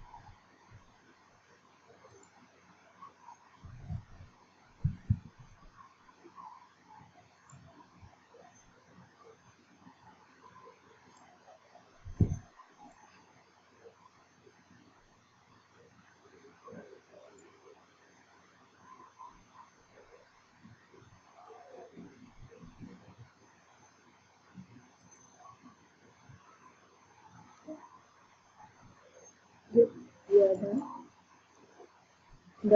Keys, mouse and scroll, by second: 2.0 ctrl+click, 2.4 ctrl+click, 7.6 ctrl+click, 13.0 ctrl+click, 17.5 ctrl+click, 25.3 ctrl+click, 30.5 click, 30.8 click.